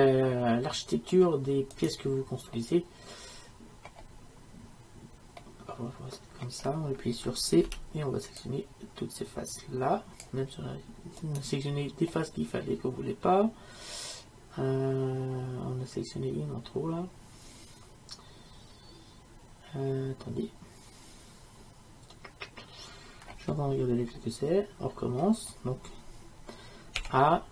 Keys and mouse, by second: 1.8-5.4 right drag, 5.4-7.7 middle drag, 7.7 c, 12.1-14.2 middle drag, 27.0-27.5 middle drag, 27.0 a.